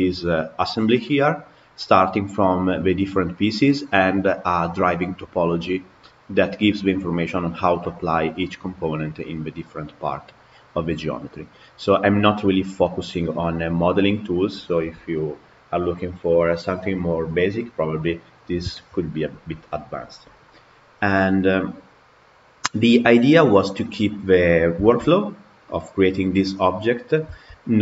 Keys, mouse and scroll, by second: 4.6 click, 21.4-25.4 middle drag, 25.4 scroll down 2, 25.7-26.7 middle drag, 26.7-27.2 scroll up 2, 27.2-27.8 shift+middle drag.